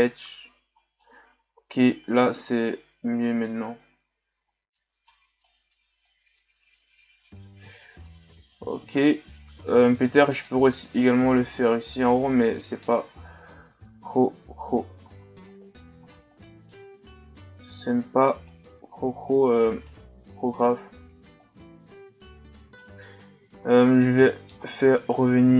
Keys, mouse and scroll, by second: 1.0-4.0 middle drag, 5.4-8.4 middle drag, 9.5-10.1 shift+scroll down 1, 10.1 middle click, 10.6 Tab, 11.0-13.1 middle drag, 13.1 shift+scroll down 4, 13.5 Tab, 15.0 ctrl+Tab, 16.1 right click, 16.3 middle click, 17.1-19.7 drag, 19.7 right click, 20.7 click, 21.5 Tab, 22.3-23.5 middle drag, 23.5 Tab, 24.0-25.5 middle drag.